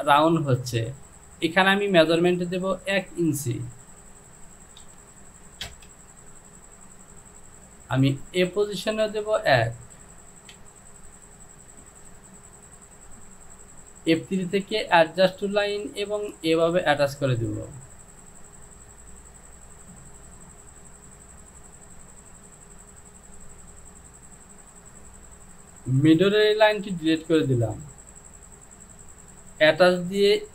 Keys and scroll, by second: 4.9 KP_1, 5.7 Return, 9.9 Down, 10.6 Down, 26.2 Delete.